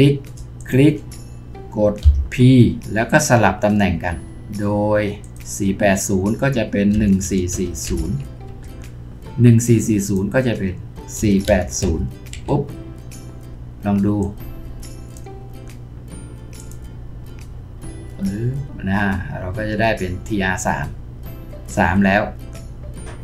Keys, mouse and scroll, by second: 0.6 shift+click, 2.0 p, 6.9-7.9 typing, 8.5 Return, 11.2-11.8 typing, 12.3 Return.